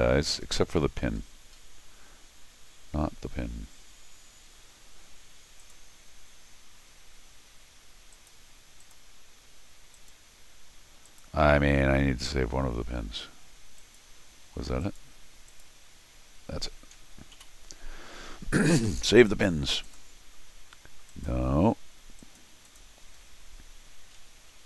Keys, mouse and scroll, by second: 0.4-1.2 scroll up 6, 5.6 click, 8.1 click, 8.8 click, 9.9 click, 11.0 click, 13.8 click, 14.8 click, 15.5 click, 19.3 click, 19.8 click, 21.1 click, 22.2 click, 22.6 click, 23.2 scroll down 1.